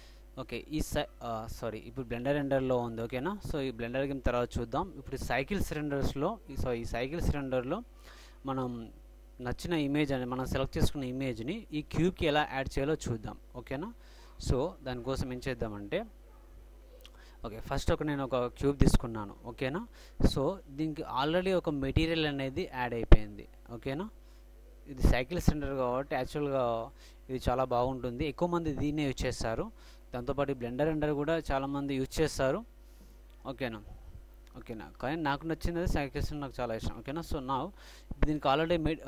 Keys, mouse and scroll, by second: 1.5-3.2 drag, 13.8-18.5 middle drag, 18.6-20.5 middle drag, 23.2-27.1 drag, 29.7-31.4 drag.